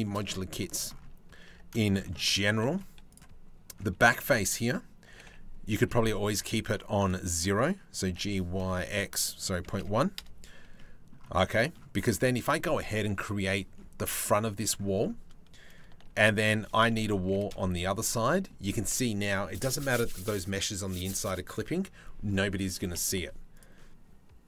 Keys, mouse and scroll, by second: 1.1 Tab, 1.4 shift+click, 3.6 3, 4.7 g, 7.7 g, 10.4 click, 11.0 Tab, 11.2 click, 11.6 click, 14.2 click, 15.7 shift+d, 16.3 r, 17.7 click, 22.8 Delete, 23.2 click.